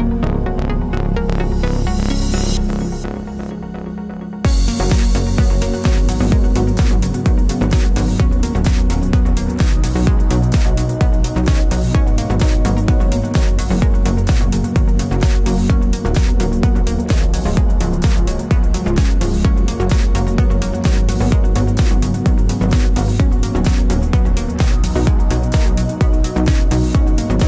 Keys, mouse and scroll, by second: 0.0 click, 0.2-5.7 middle drag, 4.7-5.0 scroll down 2, 5.4 scroll up 2, 5.7 click, 5.8 Tab, 6.4 click, 7.0 Tab, 7.7-9.4 shift+right drag, 9.4 Tab, 9.6 click, 10.4 shift+d, 10.9 Tab, 11.3 click, 11.6 click, 12.3 Tab, 12.5 a, 13.7 Tab, 14.8 ctrl+r, 16.0 3, 16.2 click, 16.7 x, 16.9 1, 17.0 click, 17.5 g, 18.8 a, 20.3 scroll up 2, 20.4-24.9 shift+middle drag, 21.2 e, 21.2 click, 21.3 Tab, 21.7 KP_7, 22.5-23.2 scroll up 2, 23.2 g, 24.9 click, 25.0-27.4 middle drag, 25.8-26.1 scroll, 27.4 click.